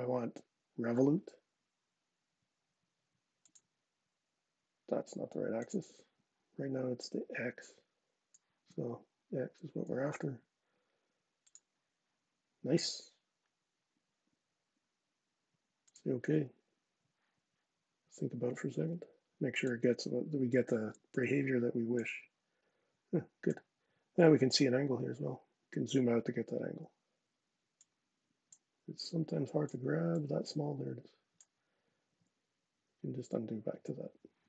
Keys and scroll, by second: 31.4 super+z, 31.8 super+z, 32.7 super+z.